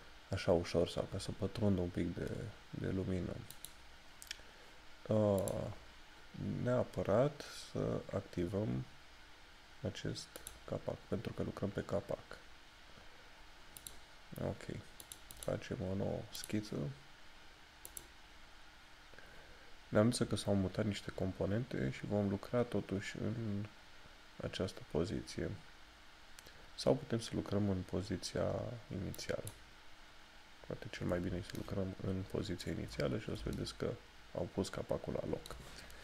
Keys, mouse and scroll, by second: 3.6 click, 10.6 click, 14.2 click, 29.2 click, 31.6 shift+middle click, 33.7 middle click.